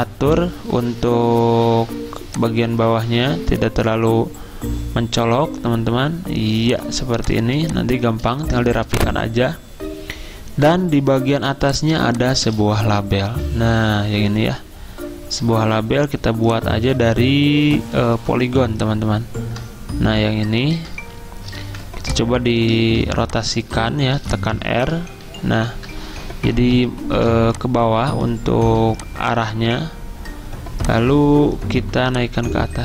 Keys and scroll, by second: 0.9 ~, 11.5 z, 13.3 m, 21.6 v, 22.8 ctrl+z, 24.2 r, 27.1 v, 28.8-30.2 typing.